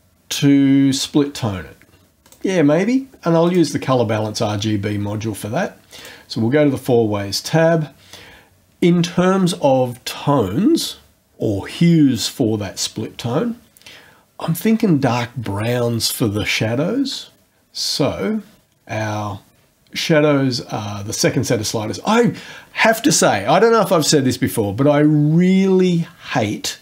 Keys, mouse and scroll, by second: 2.2 click, 3.4 click, 5.9 click.